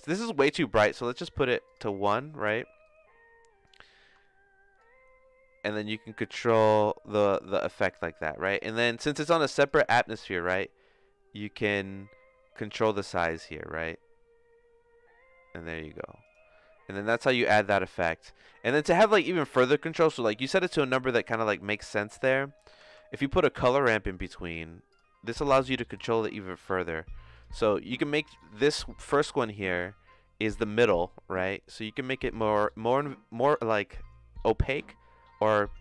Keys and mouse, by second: 1.0 click, 2.8 click, 4.8-7.9 shift+drag, 8.4 click, 10.0 s, 17.8-21.8 drag, 22.5 click, 22.8 shift+a, 25.9 click, 26.7 middle click, 28.5-31.3 drag.